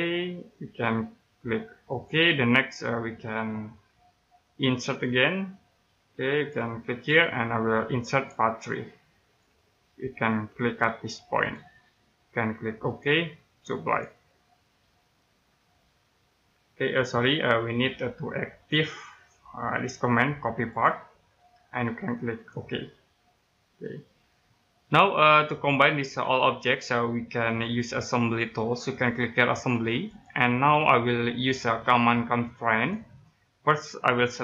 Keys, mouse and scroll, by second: 0.3 middle click, 1.9 click, 3.2 middle click, 6.3 click, 15.0 middle click, 16.9 scroll down 1, 20.7 click, 23.7-24.0 scroll down 1, 24.0 middle click, 24.7 right click, 30.0 click, 32.7 click.